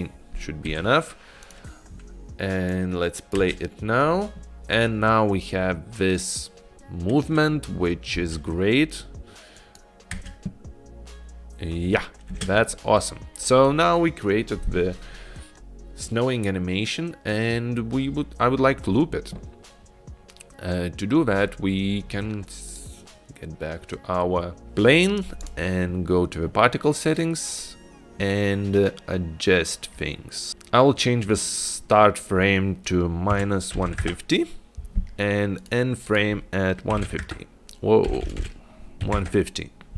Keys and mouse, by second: 3.0 click, 3.7 space, 8.3 space, 9.9 click, 10.4 space, 12.6 space, 25.5 click, 30.5-35.8 drag, 36.2-39.9 drag, 38.3 BackSpace, 38.5 BackSpace.